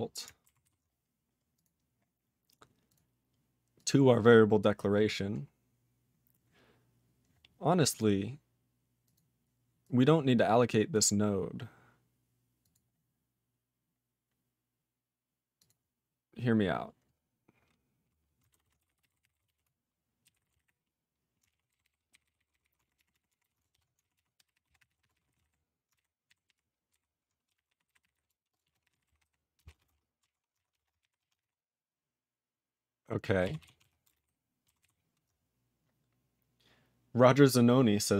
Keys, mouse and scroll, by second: 0.6 ctrl+s, 1.5 click, 1.6 click, 2.8 click, 2.9 click, 3.7 click, 3.8 click, 5.1 scroll up 2, 7.8 click, 7.9 click, 9.0 click, 9.1 click, 9.8 click, 10.9 click, 12.6 click, 12.7 click, 15.5 click, 15.6 click, 18.7-21.1 typing, 21.7 ctrl+k, 21.8 ctrl+k, 22.1 ctrl+n, 22.2 ctrl+n, 22.3 ctrl+n, 22.5 ctrl+n, 22.6 ctrl+n, 22.8 alt+f, 22.9 alt+f, 23.1 alt+f, 23.3 alt+f, 23.4 alt+b, 23.7 ctrl+>, 24.0 alt+d, 24.1-25.9 typing, 26.2 ctrl+g, 26.5 ctrl+p, 26.9 ctrl+b, 27.2-30.7 typing, 30.5 ctrl+d, 31.0 ctrl+e, 31.2 ctrl+a, 31.3 ctrl+space, 31.3 ctrl+e, 31.4 ctrl+g, 33.6 ctrl+s, 33.8 ctrl+a, 34.0 ctrl+space, 34.1 ctrl+e, 34.6 ctrl+g, 34.8 ctrl+s.